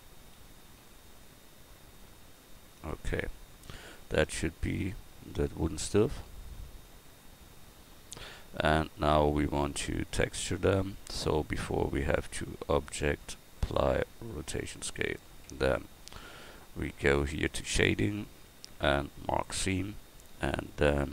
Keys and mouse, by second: 4.5 middle click.